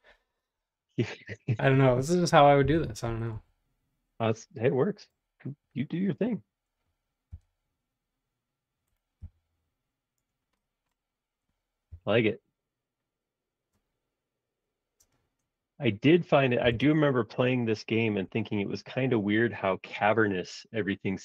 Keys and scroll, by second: 2.6 m, 4.5 space, 7.4 l, 9.2 Up, 12.0 Up, 16.0 4, 16.6 ', 16.8 Return, 17.6 space, 19.3 q.